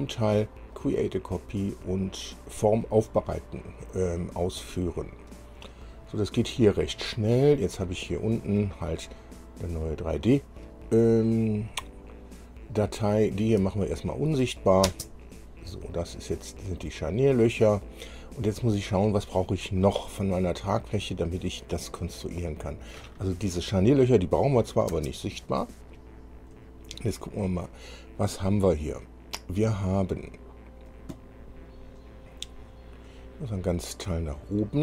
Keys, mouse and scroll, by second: 1.0 click, 4.8 click, 7.5-8.5 scroll down 3, 9.1 scroll down 1, 9.9 click, 13.5 click, 14.4 shift+click, 15.1 space, 15.9-17.0 middle drag, 19.8-20.3 scroll up 2, 22.2 scroll down 2, 24.6 click, 25.2 space, 25.7-26.4 scroll up 4, 26.7 scroll up 2, 27.3-27.7 scroll up 2, 29.7 scroll up 2, 31.7-32.3 scroll up 2, 32.5-34.0 scroll up 8, 34.3 scroll up 2.